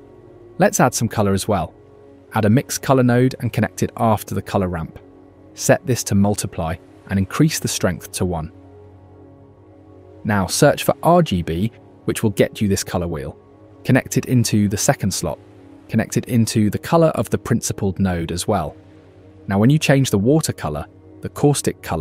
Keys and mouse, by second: 0.8 shift+a, 4.1 click, 8.5 middle click, 9.3 click, 10.8 shift+a, 17.8-19.0 drag, 20.1-21.1 drag, 21.6 shift+middle click.